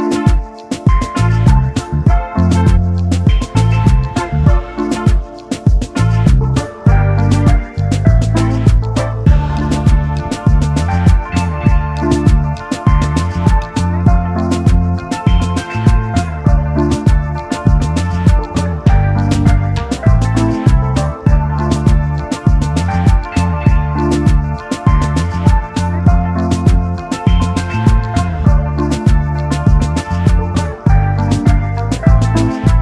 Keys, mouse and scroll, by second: 0.7 double click, 3.5-3.9 alt+scroll up 1, 4.8-5.4 alt+scroll down 1, 6.6 alt+scroll down 1, 7.3-7.6 alt+scroll up 1, 10.1-12.3 scroll up 1, 12.5 alt+scroll down 1, 12.8-13.5 typing, 15.1 typing, 15.7 alt+scroll up 1, 21.7 double click, 22.8-23.3 alt+scroll up 1, 24.1-25.0 typing, 26.6 alt+scroll up 1, 27.6 alt+scroll up 1, 31.3 shift+click, 32.4 alt+scroll down 1.